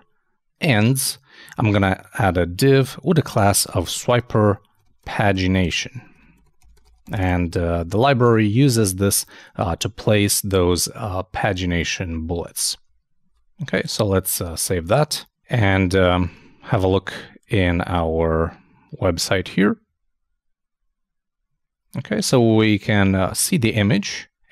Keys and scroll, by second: 13.2 super+s, 16.3 super+i, 18.1 super+r.